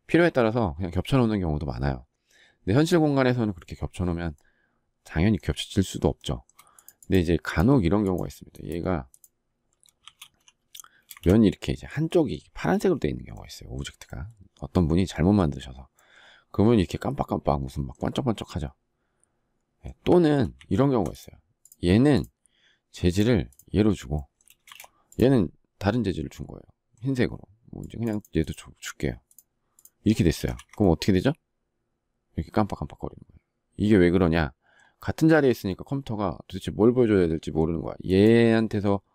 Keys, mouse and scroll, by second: 6.1 shift+middle click, 9.9 shift+r, 11.0 Escape, 20.1 ctrl+z, 24.5 space, 24.6 Escape, 30.1 space, 30.2 Escape.